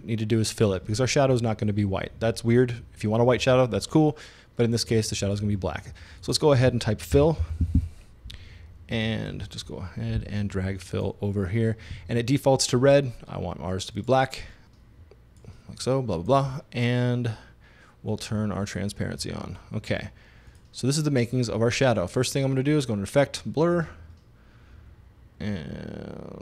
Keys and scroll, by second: 7.2 f, 7.4 i.